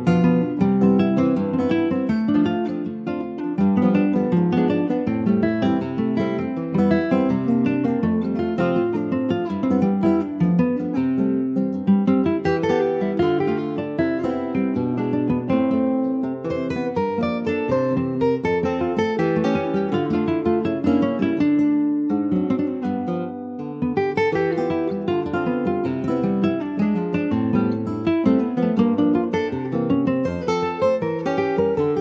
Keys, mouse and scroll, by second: 1.5 middle click, 2.1 r, 3.9 r, 8.9 alt+middle click, 9.4 alt+middle click, 10.1 alt+middle click, 11.2 r, 14.8 middle click, 15.5 alt+z, 16.0 middle click, 16.6 ctrl+s, 16.8 scroll up 3, 17.0-18.9 middle drag, 18.9 click, 19.8 shift+click, 20.7 shift+click, 21.3 middle click, 22.1 ctrl+s, 23.3 /, 23.8 click, 24.2 click, 24.5-27.2 middle drag, 27.2 scroll up 2, 27.5-31.4 middle drag, 31.4 click.